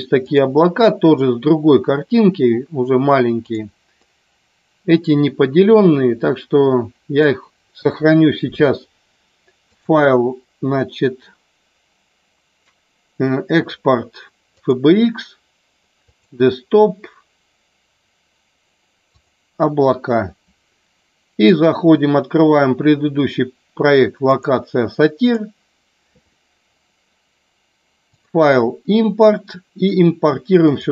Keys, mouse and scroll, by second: 0.1 click, 4.0-7.2 middle drag, 7.7 KP_1, 9.7-15.0 drag, 21.2-25.6 drag, 28.0-30.9 drag.